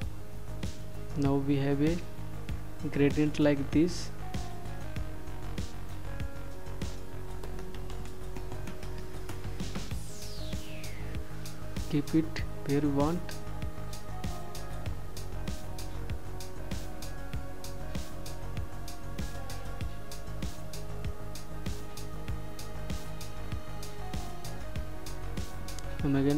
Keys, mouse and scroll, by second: 9.9 click, 12.2 ctrl+shift+click, 16.3 click.